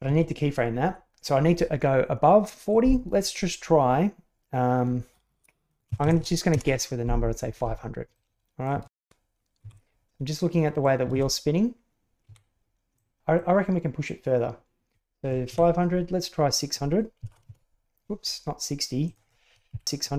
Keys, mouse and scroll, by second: 2.6-7.4 drag, 6.1 KP_0, 8.1 click, 8.8 shift+space, 9.6 Escape, 10.4 middle click, 11.0 shift+space, 12.3 Escape, 13.0 click, 13.3-15.2 drag, 15.4 Up, 16.6-18.4 drag, 19.0-20.1 drag, 19.8 KP_0.